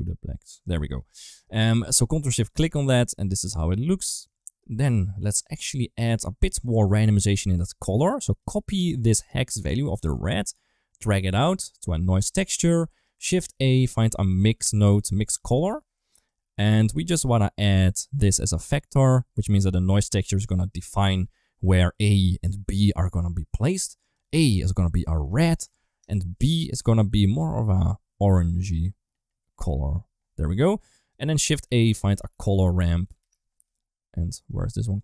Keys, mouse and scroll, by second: 1.1 middle click, 1.8 ctrl+shift+click, 2.4 right click, 2.8 ctrl+s, 4.2 middle click, 4.9 middle click, 5.8 click, 5.9 click, 6.5 middle click, 8.1 click, 10.9-12.9 drag, 13.3 shift+a, 16.5 middle click, 18.1 click, 19.8 click, 23.8 click, 26.7 click, 30.6 click, 31.5 shift+a.